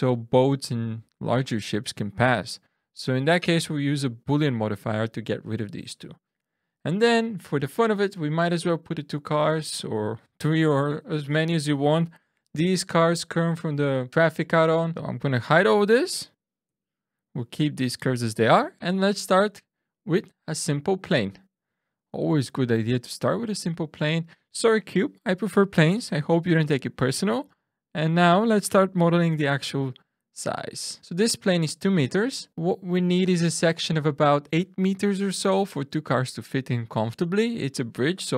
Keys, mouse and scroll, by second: 4.0 click, 12.3 n, 13.9 click, 14.8 click, 16.6 h, 18.4 shift+right click, 19.0 shift+a, 26.7 Tab, 27.5 click, 28.8 2, 29.3 click, 30.6 click, 31.0 ctrl+z, 32.5 shift+middle click, 33.0 shift+scroll down 1.